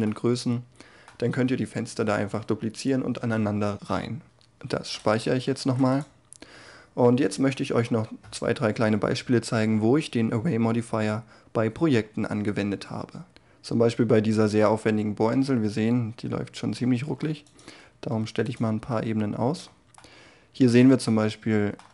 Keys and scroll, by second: 5.1 ctrl+s.